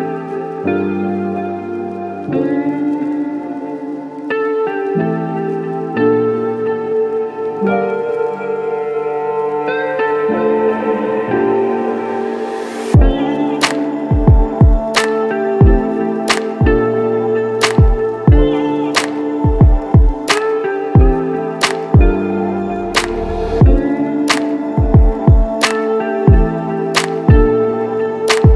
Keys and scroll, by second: 17.1 ctrl+g, 17.6-18.2 typing, 18.3 Return, 22.0 [.